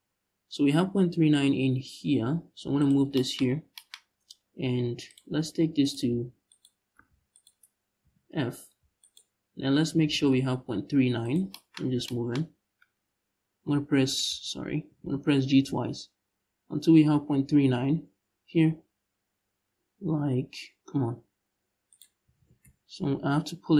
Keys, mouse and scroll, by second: 2.5 shift+click, 3.1-3.4 scroll up 2, 3.7-4.7 scroll up 2, 4.7 click, 5.5 right click, 6.7 ctrl+z, 7.0 shift+right click, 7.7 f, 8.7 alt+right click, 9.5 g, 11.0 shift+click, 11.4 scroll up 1, 12.1-13.3 scroll up 1, 13.3 f, 13.9 ctrl+z, 14.5 g, 21.6 shift+right click, 21.9 g.